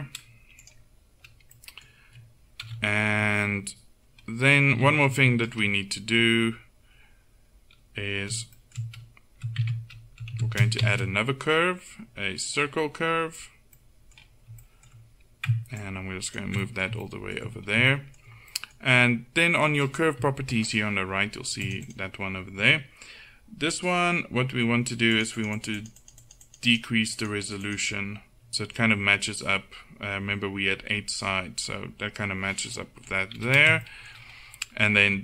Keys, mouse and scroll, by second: 0.8 right click, 2.7 KP_1, 3.5 middle click, 4.9 a, 8.3-9.6 middle drag, 9.6 Tab, 10.4 a, 15.8 click, 16.4 right click, 16.8 click, 18.2-21.7 middle drag, 21.7-29.6 drag, 32.7-34.7 middle drag.